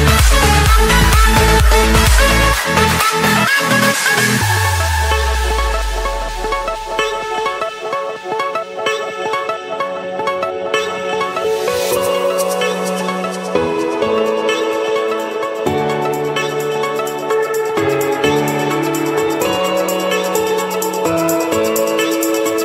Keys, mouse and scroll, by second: 0.0 click, 0.5 Escape, 1.6 click, 2.6 Escape, 2.7 Escape, 3.3-5.4 typing, 4.5 Return, 7.4 click, 8.8 click, 9.1 middle click, 9.2-9.5 scroll up 3, 9.5-10.3 scroll, 10.4 Escape, 12.5-12.9 typing, 15.7 click, 18.7 click, 20.8 click, 21.4 click.